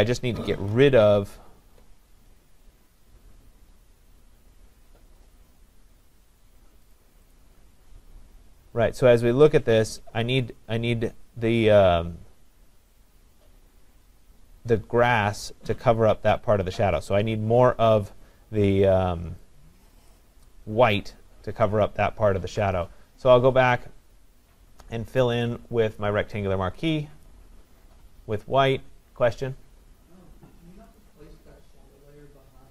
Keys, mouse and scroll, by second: 0.7 ctrl+=, 1.2 ctrl+=, 7.0 click, 7.4 click, 20.1 click, 25.2 click, 27.3-32.7 drag.